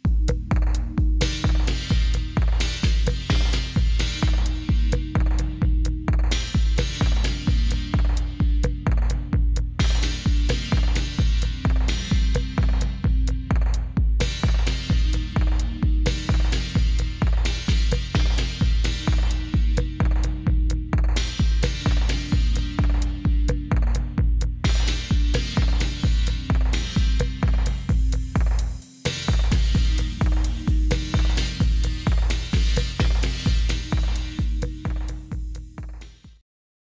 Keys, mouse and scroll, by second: 1.7 click, 3.7 s, 6.1-15.5 drag, 16.9 click, 20.1 click, 22.2 middle click, 22.3 middle click, 24.1 click, 24.5 click, 26.7 shift+click, 29.4 click, 31.6 click, 32.0 click, 36.4 click, 36.7 click.